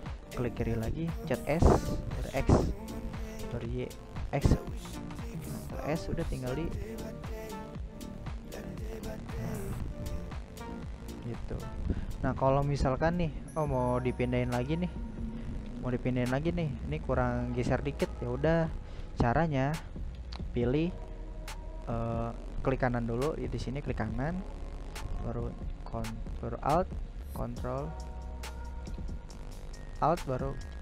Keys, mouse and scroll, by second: 5.7-7.8 middle drag, 7.8 right click, 8.4-8.8 scroll up 1, 8.8-9.8 shift+middle drag, 9.8 right click, 10.2 middle click, 11.0 scroll up 1, 11.1-11.6 scroll down 2, 11.6-14.3 shift+middle drag, 14.3-14.9 scroll up 2, 14.9-18.7 shift+middle drag, 18.7 right click, 19.2-22.7 right drag, 24.2-28.5 ctrl+alt+right drag, 28.5-30.8 middle drag.